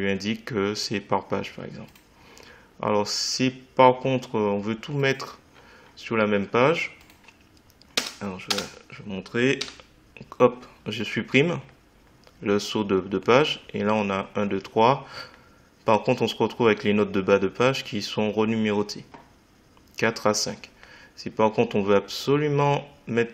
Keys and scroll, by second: 7.9 Return, 9.6 Delete.